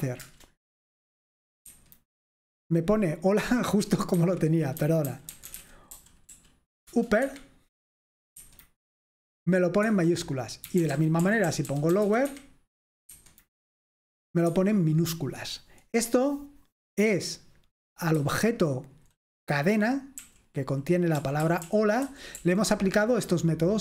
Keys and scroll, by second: 0.2 Return, 1.8 F5, 4.2 Escape, 4.6-6.8 typing, 6.9 Return, 7.2 Escape, 8.4 F5, 10.5-12.6 typing, 13.1 F5, 14.5 Escape, 18.2-18.9 typing, 20.2-22.8 typing.